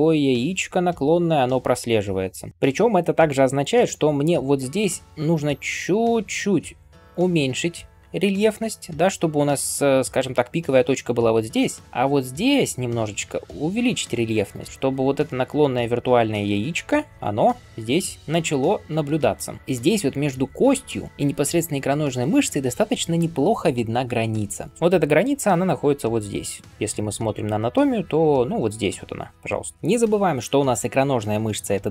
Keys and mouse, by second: 2.5-4.6 right drag, 2.5-3.5 typing, 12.5 ], 12.6 ], 12.7 ], 17.2 [, 17.3 [, 19.3 ].